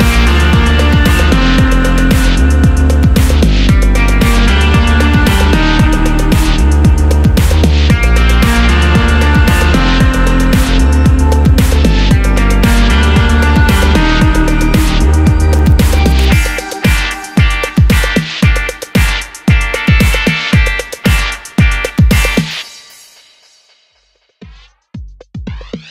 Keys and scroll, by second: 22.5 super+a.